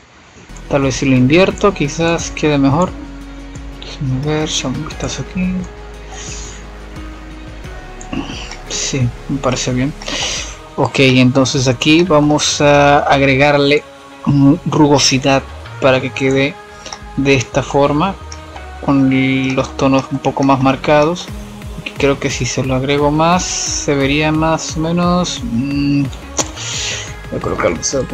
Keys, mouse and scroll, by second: 1.8 click, 2.8-3.2 drag, 3.2-4.0 middle drag, 4.0 click, 6.3 middle click, 6.3 F7, 7.8-10.0 middle drag, 10.0-11.2 scroll up 4, 11.2 scroll up 1, 11.5-11.9 scroll down 2, 11.9-12.7 middle drag, 12.7-15.1 drag, 15.1-16.0 middle drag, 16.0 click, 17.1-26.2 drag, 26.2-28.1 middle drag.